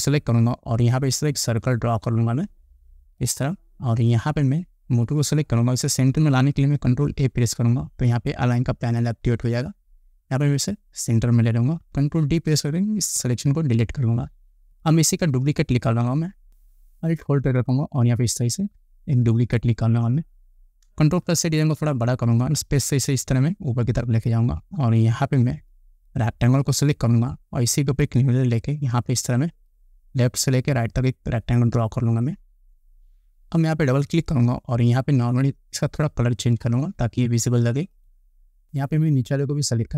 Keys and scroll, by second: 7.2 ctrl+a, 13.8 ctrl+d, 21.5 ctrl+=.